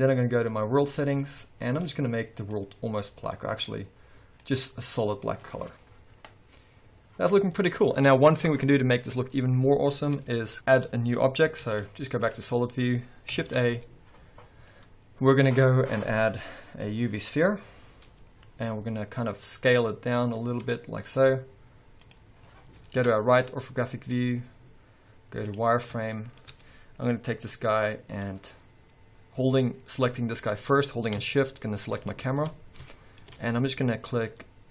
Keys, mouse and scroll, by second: 1.8-2.3 drag, 7.7 scroll up 1, 11.7 z, 13.5 shift+a, 18.2-18.9 scroll up 2, 18.9-19.5 scroll down 2, 19.8 s, 22.2 click, 22.5-23.1 scroll down 1, 24.1 z, 26.2-32.1 shift+middle drag, 27.7-29.9 scroll down 1, 29.9 scroll up 1, 32.1 shift+click, 32.7-33.0 scroll down 1, 33.0-34.7 shift+middle drag, 33.9-34.7 scroll up 1.